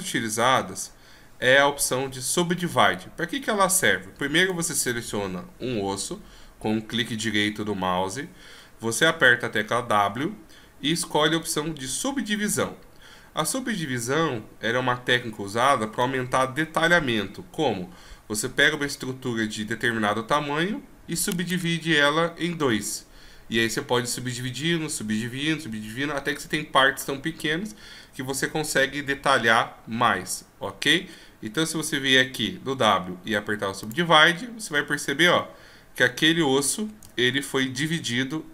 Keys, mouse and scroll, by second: 4.4 right click, 10.1 w, 34.9 scroll up 1, 36.2-36.6 ctrl+scroll down 1, 37.2-38.2 shift+scroll down 1.